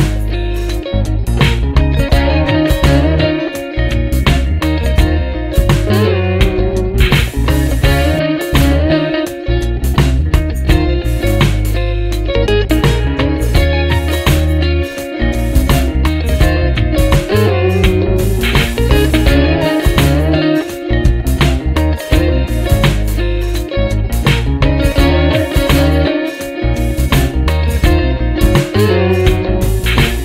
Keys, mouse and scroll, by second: 0.8 click, 1.6-2.7 drag, 2.9-5.5 drag, 7.2 click, 8.9 ctrl+d, 9.4-10.3 ctrl+drag, 11.2 click, 11.8 click, 12.7-14.2 drag, 15.8 click, 16.9-20.3 drag, 21.0 click, 21.5 click, 22.5 click, 23.9 click, 24.7 click, 25.1 click, 26.7-29.7 drag, 29.9 click.